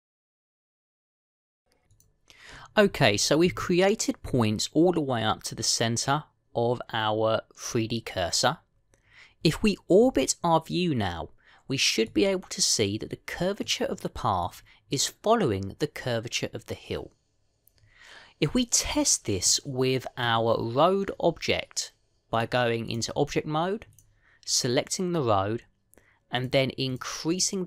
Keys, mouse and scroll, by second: 0.1 e, 0.8 e, 10.9 middle click, 13.4-13.9 scroll down 1, 14.2 scroll down 1, 14.5 middle click, 20.4 middle click, 23.2 click, 24.8 click.